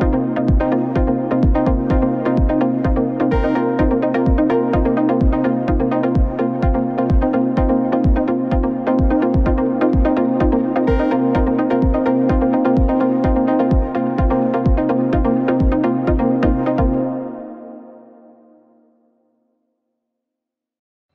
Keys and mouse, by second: 3.0-4.9 middle drag, 7.0 alt+shift+click, 9.7 alt+shift+click, 12.2 ctrl+b, 17.6-18.5 drag, 18.4 ctrl+z, 18.7 ctrl+z, 19.8 ctrl+shift+z.